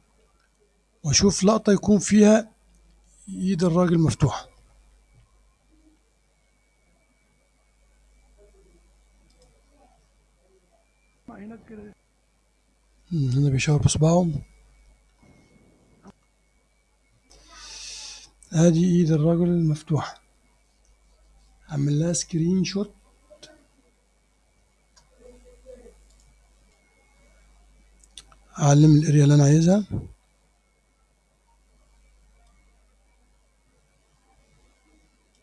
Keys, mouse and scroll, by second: 9.4 click, 11.3 space, 15.2 space, 16.1 space, 26.1 click, 26.7 click, 29.5 click, 32.5-35.4 drag.